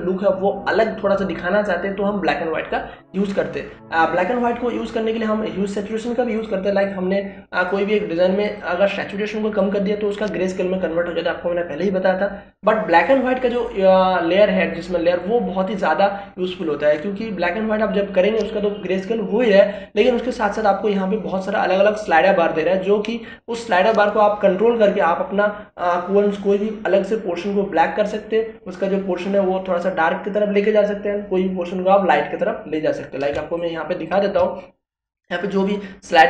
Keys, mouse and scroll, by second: 7.4-27.6 drag, 34.3 space, 34.6-36.2 ctrl+drag.